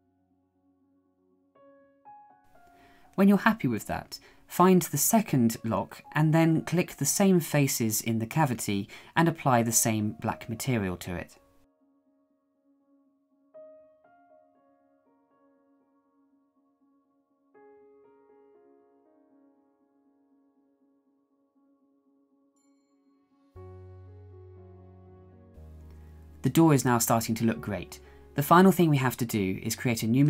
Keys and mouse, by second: 26.5 KP_1.